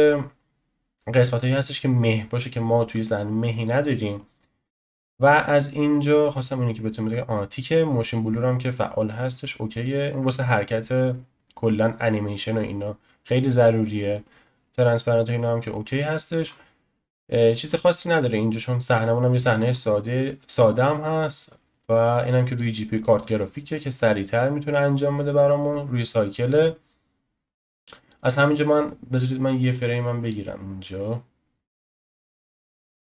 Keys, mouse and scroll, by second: 2.1-4.6 scroll down 1, 4.6-5.5 drag, 5.5-6.3 scroll down 1, 6.3-9.3 scroll down 2, 9.3-9.9 scroll down 3, 9.9-10.5 scroll down 1, 10.5-12.1 scroll down 1, 12.1-13.7 scroll down 2, 13.7-14.7 scroll down 2, 14.7-16.4 scroll down 1, 16.4-17.6 scroll up 1, 17.6-18.2 scroll up 5, 18.2-19.7 scroll up 4, 19.7-20.8 scroll up 3, 20.8-22.1 scroll up 5, 22.1-22.5 scroll up 1, 22.5-25.5 drag, 29.7-33.1 drag.